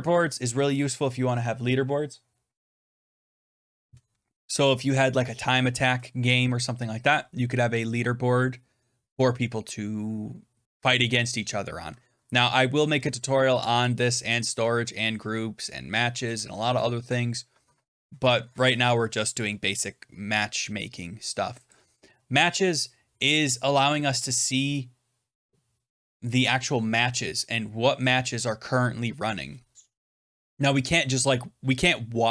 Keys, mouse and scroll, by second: 21.7 click.